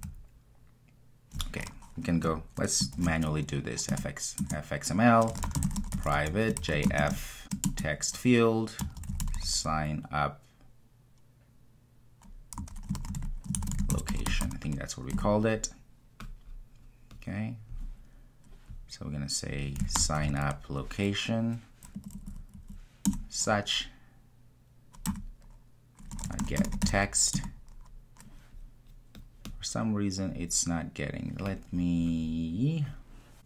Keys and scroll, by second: 4.3 Return, 7.6 Return, 23.1 Return, 27.3 Return.